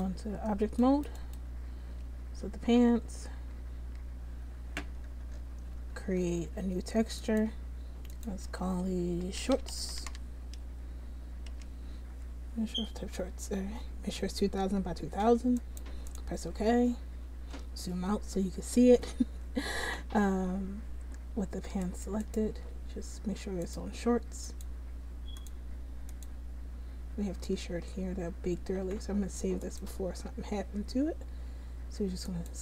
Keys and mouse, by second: 0.8 click, 1.3 right click, 1.8 Tab, 2.3 Tab, 2.8 Tab, 3.4 a, 3.9 a, 21.5 Tab, 22.7 Tab, 28.0 Tab.